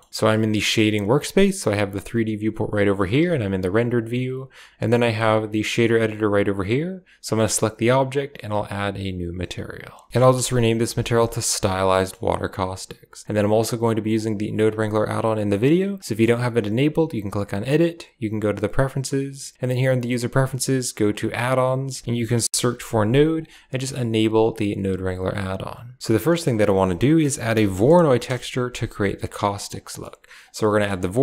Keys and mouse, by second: 2.0 click, 3.1 z, 7.3 right click, 9.8 click, 11.6 a, 11.8 middle click, 14.1-15.1 drag, 15.4 middle click, 16.0 click, 17.6-18.7 drag, 26.5 shift+a, 29.7 middle click, 30.3 click, 30.6 middle click.